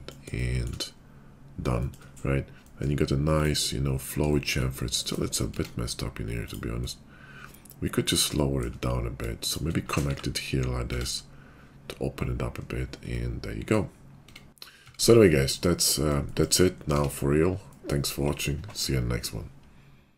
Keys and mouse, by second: 5.7 Tab, 8.3-9.4 shift+middle drag, 9.4 shift+click, 9.6-15.3 shift+middle drag, 10.1 1, 11.0 Tab, 14.8 Tab, 15.3 click, 15.4 middle click, 15.9 shift+click, 16.2 shift+middle click, 16.8 click, 16.9 Tab, 16.9 middle click, 17.1 click, 17.2 middle click, 17.9-19.4 drag, 19.4 middle click.